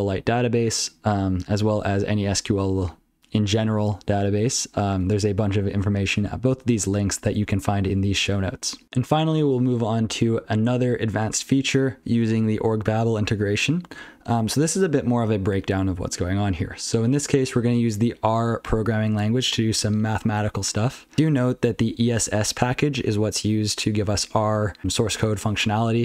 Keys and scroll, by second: 1.0 ctrl+p, 1.5 ctrl+n, 1.7 ctrl+n, 2.1 ctrl+f, 2.5 ctrl+n, 2.5 ctrl+f, 3.0 ctrl+f, 3.5 ctrl+a, 3.6 ctrl+f, 4.0 ctrl+p, 4.2 ctrl+p, 4.6 ctrl+n, 4.8 ctrl+n, 5.2 ctrl+f, 5.4 ctrl+n, 5.4 ctrl+f, 5.5 ctrl+f, 6.2 ctrl+p, 6.4 ctrl+p, 6.6 ctrl+n, 6.9 ctrl+p, 7.2 ctrl+n, 7.4 ctrl+p, 7.6 ctrl+n, 7.8 ctrl+p, 8.0 ctrl+p, 10.2 ctrl+n, 12.1 ctrl+n, 12.5 ctrl+p, 17.0-17.5 ctrl+f, 17.6 ctrl+e, 18.6 ctrl+n, 19.1 ctrl+p, 19.5 ctrl+a, 20.8 ctrl+n, 21.1 ctrl+alt+f, 21.3-21.6 ctrl+alt+f, 21.8 ctrl+alt+f, 22.0 ctrl+alt+f, 22.2 ctrl+alt+f, 22.3 ctrl+alt+f.